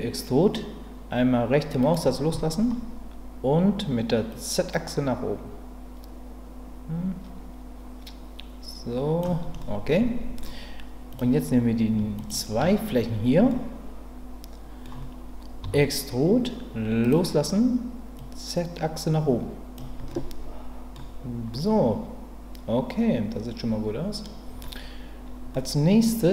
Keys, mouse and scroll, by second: 1.8-4.3 right drag, 4.3-9.2 drag, 9.6 middle click, 11.1 click, 13.5-14.8 middle drag, 15.6 e, 18.2-19.7 drag, 20.1 middle click, 21.5-24.6 middle drag, 25.5 middle click.